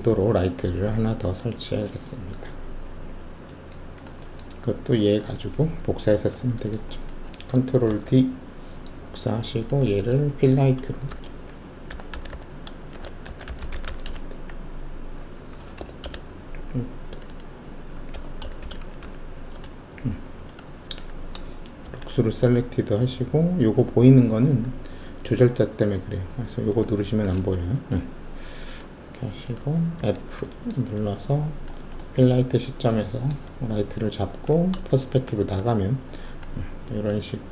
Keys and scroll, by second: 7.8 ctrl+alt+d, 11.0-13.9 typing, 16.0 Return, 16.0 BackSpace, 18.1 Home, 18.6 shift+b, 19.0 Delete, 19.5 Return, 20.5 Return, 21.8 alt+shift+z, 30.0 alt+f, 34.9 alt+shift+q.